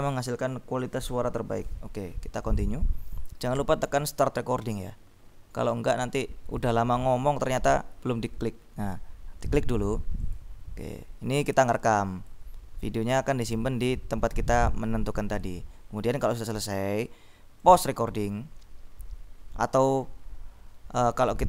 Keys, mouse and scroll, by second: 2.5 click, 10.3 click, 11.7 click, 17.9 click.